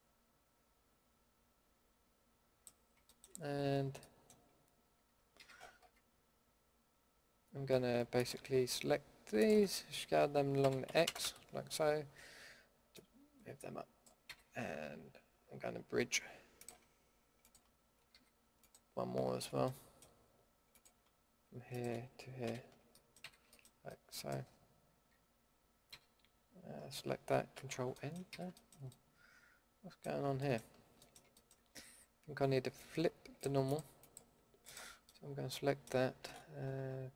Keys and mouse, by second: 3.7-4.2 middle drag, 5.3 a, 5.8 a, 10.6 s, 14.2 a, 18.1 a, 19.6 middle click, 22.4 f, 23.2 a, 23.9-24.3 middle drag, 24.4 middle click, 25.9 a, 27.5 alt+n, 28.3 a, 33.3-35.0 middle drag, 35.0-35.6 drag, 35.6-37.1 middle drag.